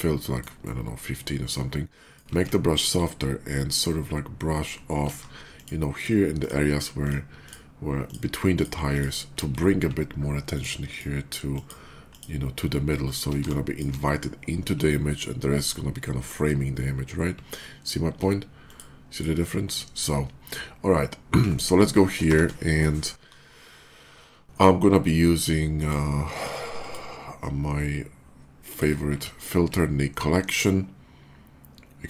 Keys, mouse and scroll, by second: 0.5-2.0 alt+right drag, 2.3 scroll up 2, 3.7 alt+click, 5.1 ctrl+z, 5.4 click, 5.8 click, 6.3 click, 6.9 click, 7.3 click, 7.9 click, 8.4 click, 8.8 click, 10.4 alt+click, 10.7 alt+click, 11.4 alt+click, 11.9 alt+click, 13.0 alt+middle click, 13.0 scroll up 1, 13.3 space, 13.3 click, 18.5 alt+click, 25.4 click, 26.5 click, 28.5 click.